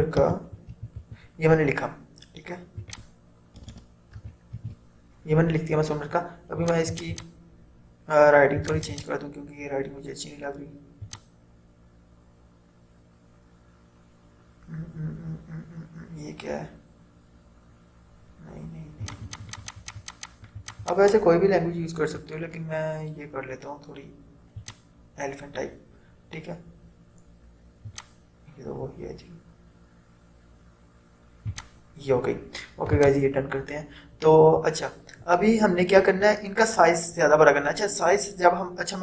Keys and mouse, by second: 0.0-1.6 typing, 2.9 click, 3.7-5.4 typing, 6.7 click, 8.9 click, 19.2-24.7 drag, 27.9 click, 31.5 click.